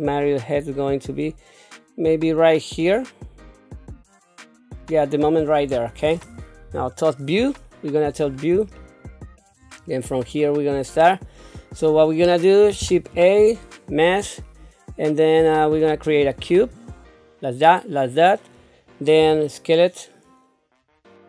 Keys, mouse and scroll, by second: 6.7 KP_7, 7.6-8.3 scroll down 2, 8.8 shift+middle click, 9.8 scroll up 1, 10.4 scroll down 2, 10.9 scroll up 3, 13.1 shift+a, 13.7-14.0 scroll, 19.2 s.